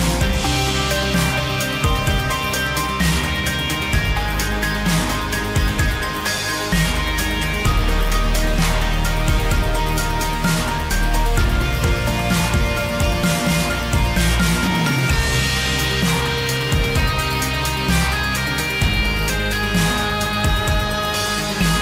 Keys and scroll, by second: 21.4 ctrl+t.